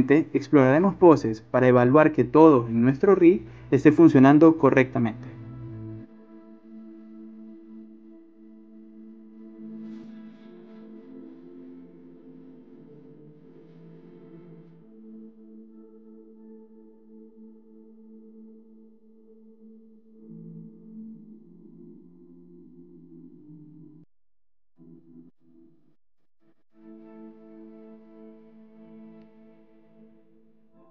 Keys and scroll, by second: 1.0-4.8 typing, 5.9 e, 6.8 r, 8.3-12.7 typing, 10.1 Return, 13.6 ctrl+z, 13.7 Caps_Lock, 14.3 ctrl+z, 15.2 e, 15.6 w.